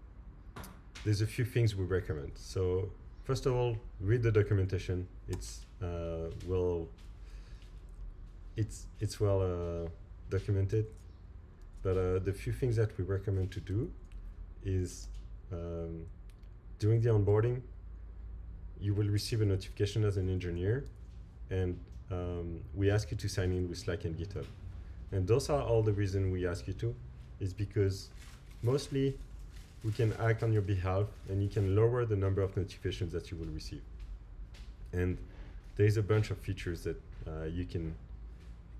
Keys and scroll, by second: 5.3 alt+super+Right, 7.7 alt+super+Left, 10.7 alt+super+Right, 13.7 Right, 15.0 Right, 17.4 Right, 20.9 Right.